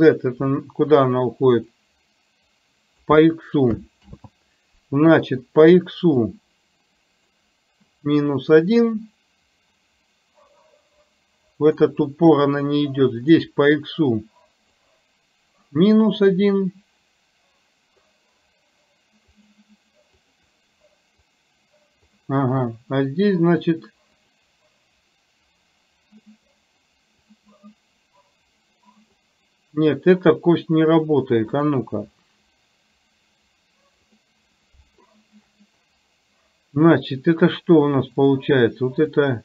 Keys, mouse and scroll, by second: 2.0-3.3 drag, 6.1 click, 9.0-11.9 drag, 14.9 click, 16.4-18.1 drag, 19.5 click, 20.1 click, 21.3 click, 23.6 click, 24.3 click, 27.4-29.3 drag, 31.6 click, 34.1 click, 39.3-39.4 drag.